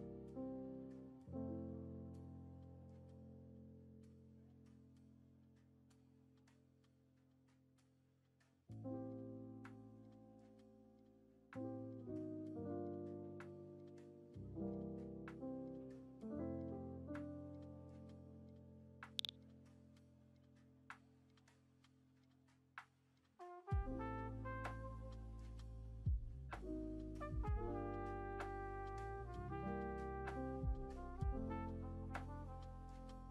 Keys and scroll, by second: 1.8 ctrl+v, 6.1 1, 9.3 Return, 10.0 4, 10.5 Return, 30.7 BackSpace.